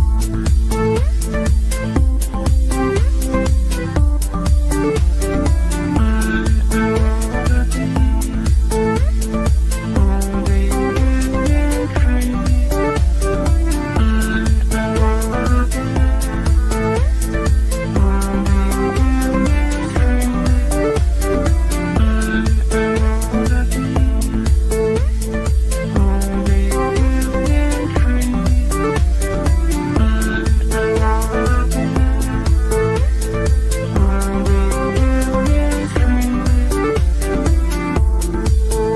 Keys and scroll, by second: 2.8 g, 37.0 e.